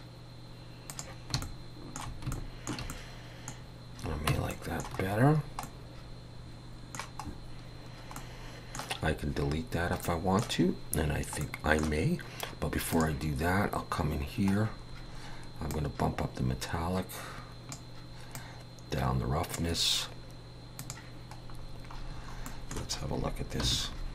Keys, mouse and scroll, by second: 20.8 click, 21.7-22.5 scroll down 6, 22.5 middle click, 23.6 /.